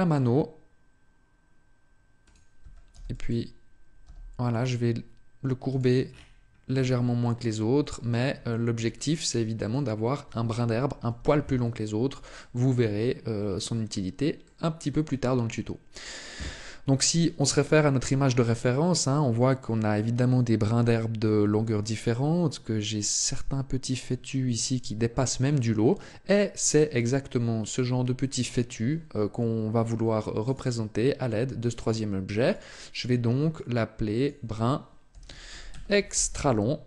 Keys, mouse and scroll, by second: 2.1 click, 2.4 a, 2.7 b, 3.8 g, 5.5 click, 5.9 scroll down 1, 6.5 Tab, 7.0 middle click, 8.3 shift+middle click, 8.7 middle click, 10.9 z, 12.1 shift+middle click, 13.1-13.5 scroll up 2, 13.5 middle click, 14.3 middle click, 15.0 shift+middle click, 32.3 click.